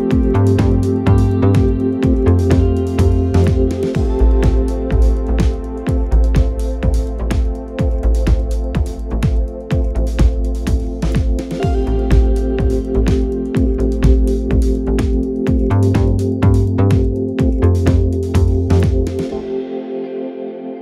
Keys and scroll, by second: 3.0 4, 4.2 ctrl+z, 5.3 e, 7.4 3, 8.3 p, 9.9 p, 11.6 p, 13.7 p, 14.4 p, 17.3 p, 19.6 p.